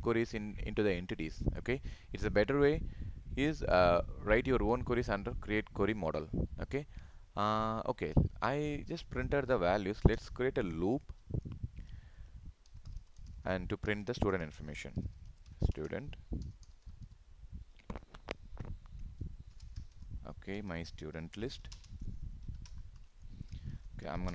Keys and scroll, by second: 21.8 ctrl+space.